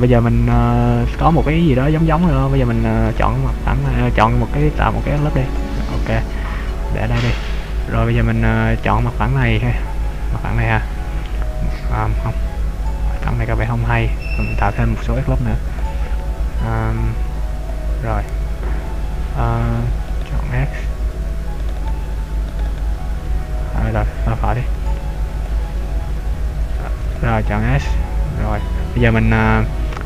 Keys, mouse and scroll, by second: 0.0 right click, 0.7 Tab, 1.3 middle click, 3.3 right click, 4.9 ctrl+r, 7.1 click, 8.9 right click, 9.5 middle click, 15.1 ctrl+r, 17.7 click, 20.2 right click, 21.7 right click, 22.0 right click, 22.7 shift+right click, 22.9 right click, 24.6 r, 25.6 click, 25.9 ctrl+z, 26.7 ctrl+r, 28.6 click, 29.2 middle click.